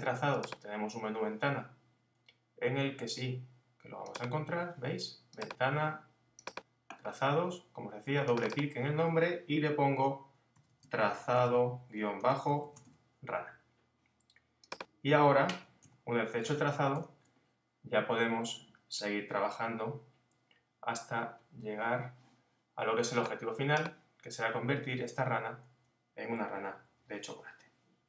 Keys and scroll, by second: 12.2 shift+_, 15.8 super+-.